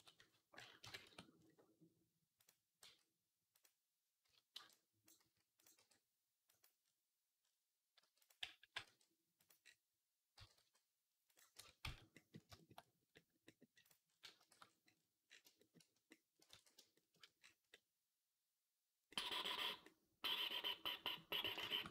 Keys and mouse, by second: 0.6 KP_3, 0.9 Tab, 1.9-6.6 drag, 2.7 s, 4.1 z, 4.4 b, 5.1 s, 5.6 r, 7.3-10.2 drag, 7.8 r, 8.4 g, 10.2 g, 11.4 Tab, 11.7 z, 12.0-21.9 middle drag, 14.3 shift+c, 16.4 ctrl+s.